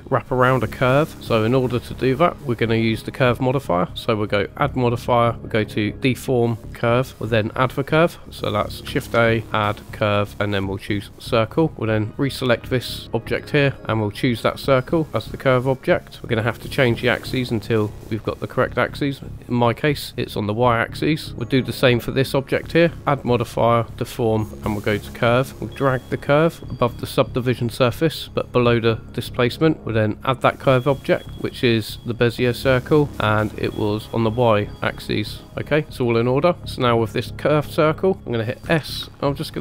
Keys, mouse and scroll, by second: 1.1 middle click, 4.5-6.6 drag, 8.9 shift+a, 12.1 click, 13.9-16.0 drag, 16.2 scroll down 2, 16.8-18.1 drag, 20.7-21.3 middle drag, 23.0 click, 24.8 click, 25.9-27.9 drag, 30.0-32.2 drag, 33.1-33.7 drag, 34.5-35.2 middle drag, 36.3 click, 36.6 middle click, 37.4-38.3 middle drag, 38.6 s.